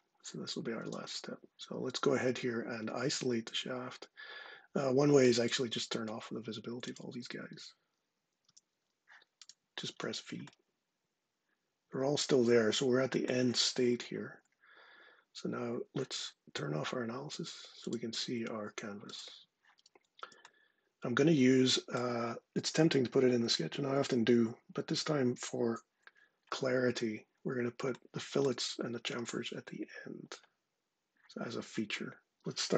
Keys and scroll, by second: 8.2 v.